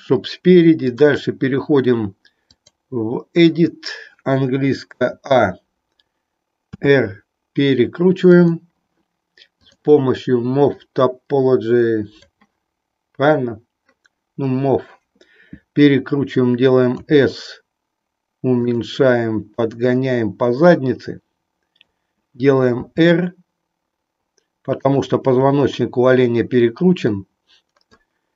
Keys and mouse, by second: 0.8-2.8 drag, 5.0 a, 6.6 r, 9.5 click, 10.6-12.3 drag, 16.9 s, 19.4-21.9 drag, 22.6 r, 24.8 click, 27.1 click.